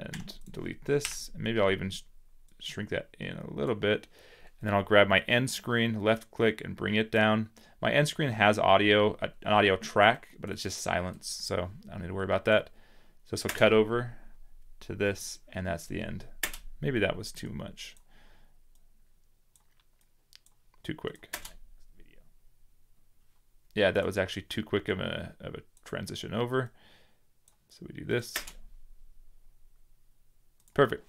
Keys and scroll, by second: 0.0 v, 0.8 Delete, 13.4 space, 16.3 space, 17.5 space.